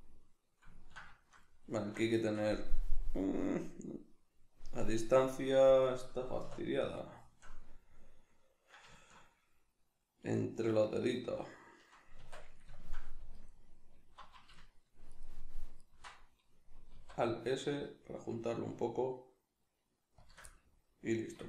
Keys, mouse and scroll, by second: 6.4 \, 12.2 Tab, 13.3 alt+right click, 14.5 alt+shift+right click, 15.2 alt+shift+right click, 15.8 alt+shift+right click, 17.0 alt+s, 20.3 shift+click, 20.5-21.4 middle drag.